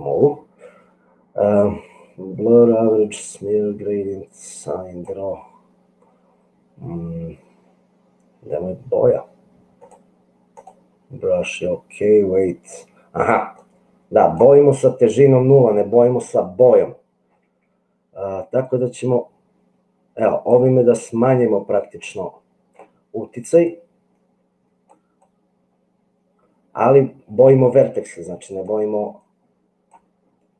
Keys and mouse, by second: 4.7 click, 9.9 click, 13.6 click, 18.7-20.5 drag, 21.2-22.8 middle drag, 23.6-24.9 drag, 25.5-28.7 drag, 29.1 click.